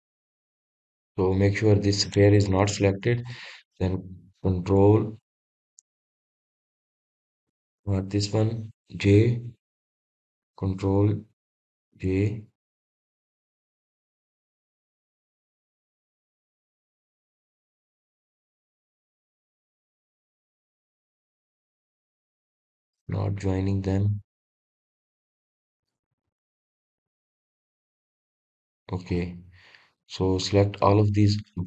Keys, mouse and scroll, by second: 0.8 shift+click, 1.7-4.8 middle drag, 6.3 ctrl+p, 16.8 scroll down 1, 17.1-17.6 scroll up 1, 17.6-18.4 scroll down 1, 18.4-18.8 scroll up 1, 18.8-19.3 scroll down 1, 19.3 click, 20.1 click, 22.3-23.4 middle drag, 23.4 click, 24.4 KP_3, 25.5 drag, 27.5-28.1 scroll up 2, 28.1-29.8 middle drag, 29.8 drag, 30.2-31.1 scroll down 1, 31.1 drag.